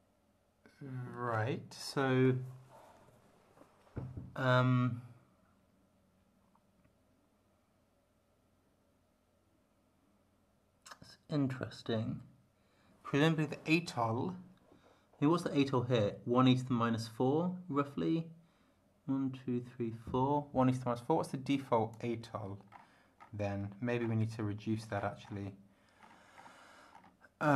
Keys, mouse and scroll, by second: 21.5 click, 22.7 scroll down 2, 23.2 scroll down 2, 24.0 scroll down 2, 25.0 scroll up 2, 26.0-26.6 scroll up 4, 26.9 scroll up 2.